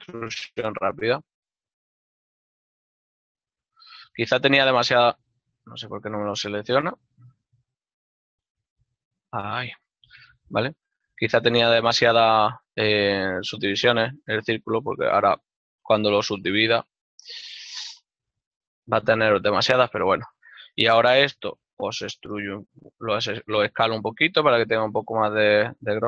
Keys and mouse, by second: 4.1 alt+right click, 5.2 middle click, 6.7 alt+right click, 7.1 ctrl+middle click, 8.6 middle click, 9.5 ctrl+middle click, 10.7 alt+right click, 11.5 ctrl+middle click, 13.2 g, 13.8 ctrl+middle click, 14.7 alt+right click, 15.4 ctrl+middle click, 17.5 click, 17.9 ctrl+middle click, 21.4 s, 25.5 click.